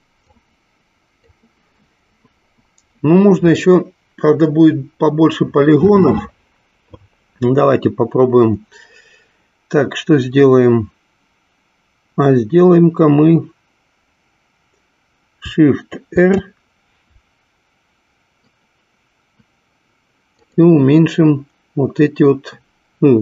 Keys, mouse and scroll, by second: 0.5-1.8 drag, 16.1 shift+r.